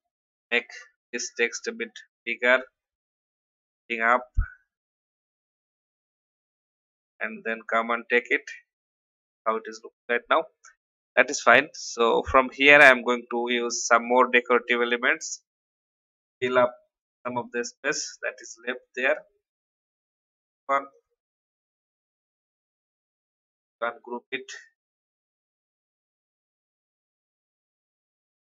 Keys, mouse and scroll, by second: 1.5 shift+scroll up 1, 2.6 shift+Up, 3.2 shift+Down, 4.8 click, 5.6 Up, 5.8 Up, 6.7-7.1 scroll down 1, 7.6 click, 11.1-18.6 drag, 21.3 right click, 22.4-24.6 drag, 26.6-27.7 shift+drag.